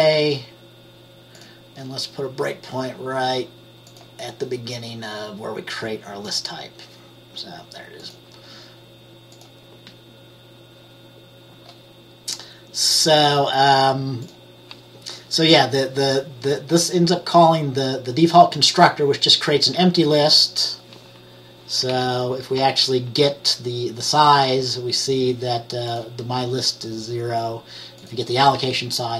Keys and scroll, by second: 22.0 F10, 22.7 F10.